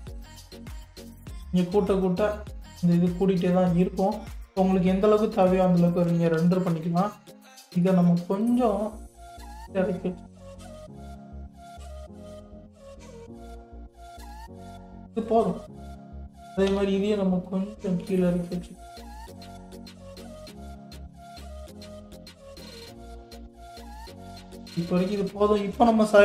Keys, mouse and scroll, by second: 1.7-4.6 drag, 4.6-5.0 scroll down 1, 5.0-6.3 middle drag, 6.3 KP_3, 7.0-7.6 scroll up 3, 7.6 shift+middle click, 8.4 click, 9.6 g, 15.7 click, 16.7 g, 24.6 click, 24.9 scroll down 3.